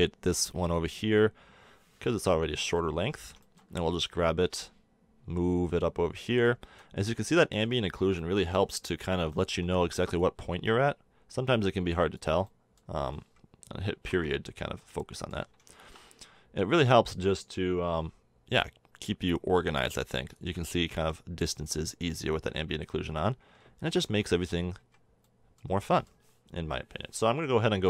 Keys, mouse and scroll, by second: 0.7-2.6 drag, 2.8 drag, 4.4-6.3 drag, 7.0 middle click, 10.2-12.1 drag, 13.0 middle click, 14.1 KP_Decimal, 20.0-20.4 drag, 20.8 click, 20.8-22.4 middle drag, 22.4 click, 24.0 KP_3, 24.8 KP_1, 25.2-26.6 middle drag, 26.6 Tab.